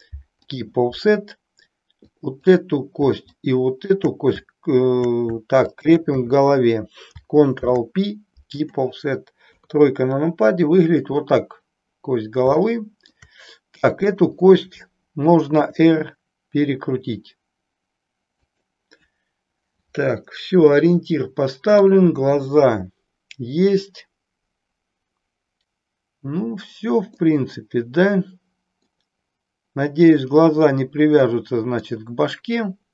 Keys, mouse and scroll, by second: 2.0 click, 3.2 shift+click, 5.8 shift+click, 7.5 ctrl+p, 9.5 KP_3, 12.6 shift+middle click, 14.0 click, 15.6 r, 18.4 click, 20.6-22.0 middle drag, 27.1-28.9 middle drag, 31.3 middle click, 32.4-32.9 middle drag.